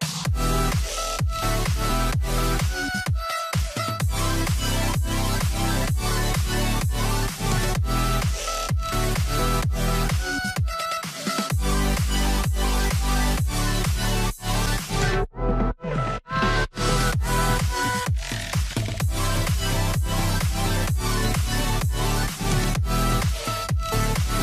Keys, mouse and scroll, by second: 0.2 double click, 6.8 double click, 7.7 2, 7.8 Return, 14.5 Return, 14.7 scroll down 1, 15.0 middle click, 18.4 middle click, 18.7 scroll up 1, 24.3 scroll up 1, 24.3 double click.